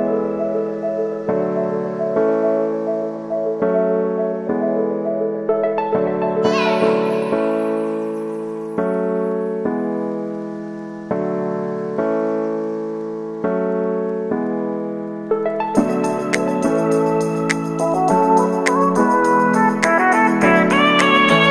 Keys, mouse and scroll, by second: 0.0-0.4 typing, 1.2-17.8 drag, 17.8 space, 19.7-21.5 drag.